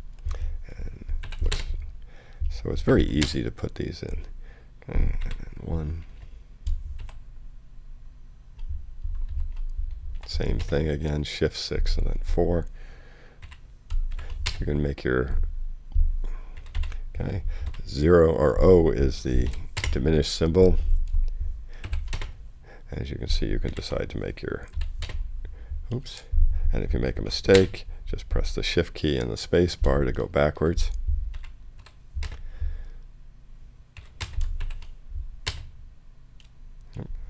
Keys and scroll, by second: 1.2-4.1 typing, 5.2 i, 6.7 shift+space, 7.0 shift+v, 9.3 shift+6, 10.1 shift+4, 10.6 space, 13.4-14.6 typing, 16.6 i, 17.6 o, 19.4 6, 19.8 space, 21.8 shift+v, 22.1 shift+space, 23.1 space, 23.7 shift+i, 24.7 shift+6, 25.0 space, 25.9 BackSpace, 27.5 shift+space, 30.2 shift+BackSpace, 31.3 i, 31.8 6, 32.2 space, 33.9 i, 34.2 space, 34.6 shift+v, 35.4 shift+space.